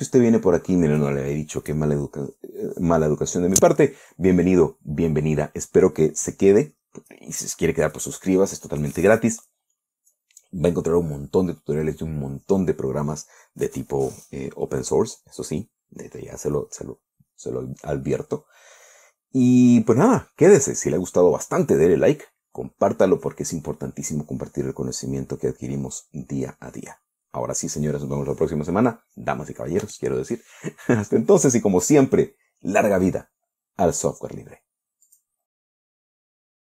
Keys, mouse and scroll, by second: 35.6 click.